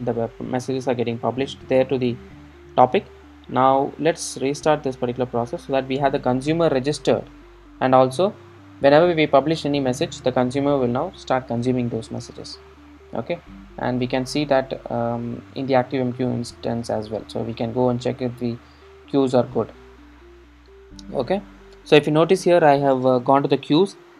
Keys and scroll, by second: 4.9 super+r.